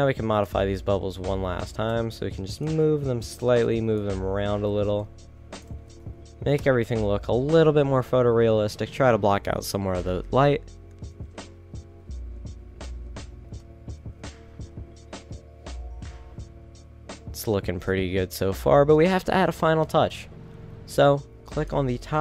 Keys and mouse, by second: 1.3 z, 1.4 z, 1.8 g, 3.0 a, 3.7 b, 4.9 g, 5.9 a, 6.2 z, 6.7 KP_0, 7.6 shift+z, 14.3 middle click, 20.6 shift+z.